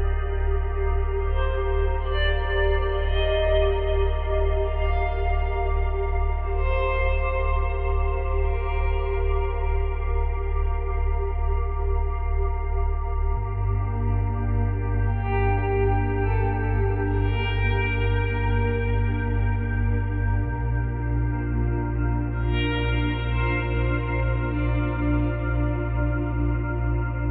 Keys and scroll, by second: 7.8 space, 10.6 space.